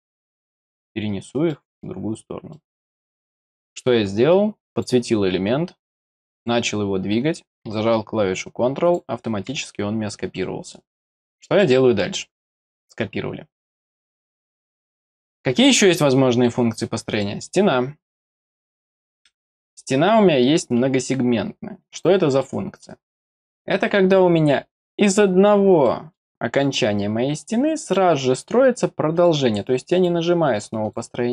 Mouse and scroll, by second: 1.5 middle click, 2.5 middle click, 4.7 click, 6.3 click, 8.8 click, 10.3 middle click, 12.4 middle click, 14.7 middle click, 17.1 click, 18.5 click, 21.8 click, 22.4 middle click, 23.3 click, 24.8 click, 25.8 middle click, 26.6 click, 27.8 click, 29.1 click, 29.9 click, 30.8 click.